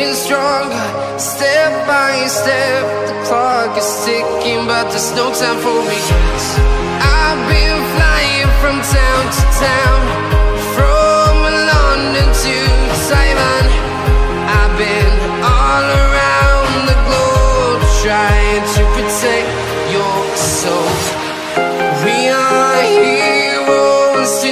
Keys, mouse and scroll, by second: 6.5 ctrl+Num_Lock, 6.7 click, 7.5 click, 8.5 click, 8.7 Return, 9.0 click, 10.2 Delete, 11.8 click, 12.1-13.0 scroll down 1, 13.0 click, 20.0 right click, 20.4 click, 21.0 ctrl+click, 21.1 right click, 21.6 click, 22.0-23.5 scroll up 1, 23.5 click.